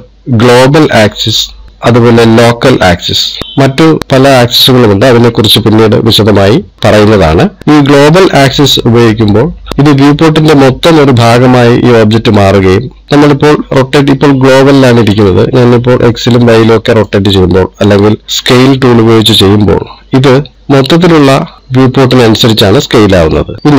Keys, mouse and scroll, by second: 1.7 click, 14.3 click, 16.5 click, 18.5 click, 20.5 click, 21.9 click.